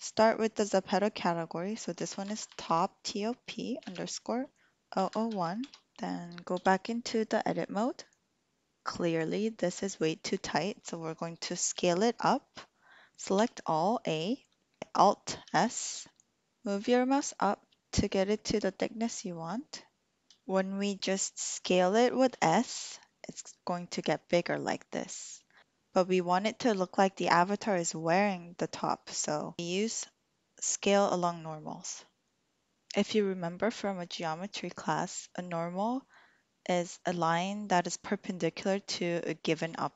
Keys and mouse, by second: 5.1 0, 6.6 Tab, 13.3 a, 15.4-20.2 alt+s, 20.4 a, 22.3 s.